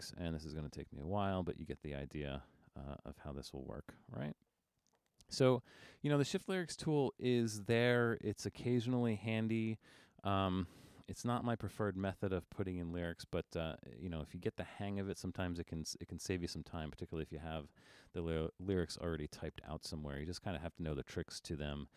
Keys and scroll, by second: 7.3 super+-, 11.4 super+=.